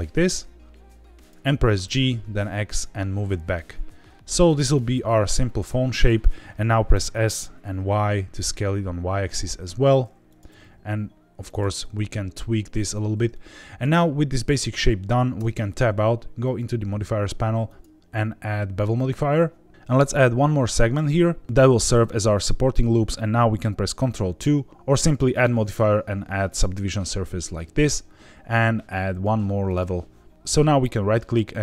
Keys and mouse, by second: 1.1 click, 1.8 g, 2.3 x, 4.7 click, 5.2 middle click, 6.9 s, 7.2 y, 10.2 click, 10.4 g, 10.6 z, 11.4 click, 11.7 middle click, 13.3 shift+middle click, 15.3 Tab, 16.5 click, 17.6-19.0 drag, 20.9 click, 25.4-26.6 drag, 29.6 click, 30.9-31.6 right drag.